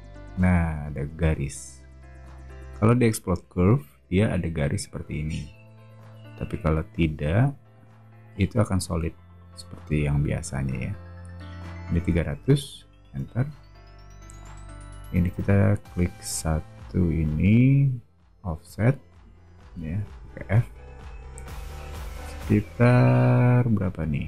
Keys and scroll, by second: 12.0-13.0 typing, 14.1 space, 18.6 f.